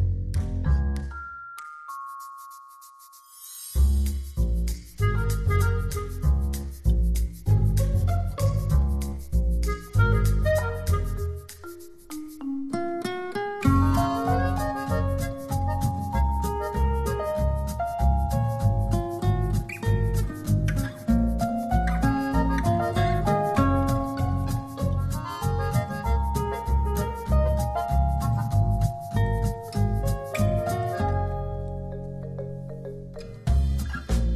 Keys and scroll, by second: 32.5 shift+Left.